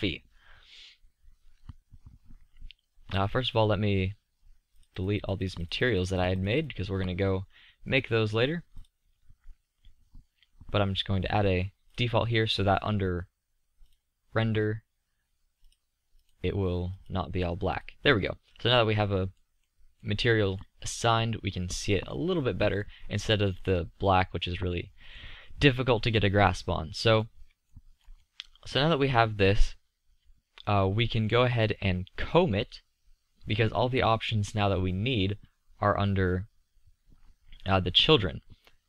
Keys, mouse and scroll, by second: 8.6 click, 10.6-11.9 drag, 10.8-11.8 middle drag, 10.8-11.9 right drag, 13.8 click, 18.3-21.6 middle drag, 22.0-24.7 middle drag, 27.8-28.5 middle drag, 28.8-29.2 middle drag, 29.5-30.2 middle drag, 31.3 middle click, 33.1-38.8 middle drag.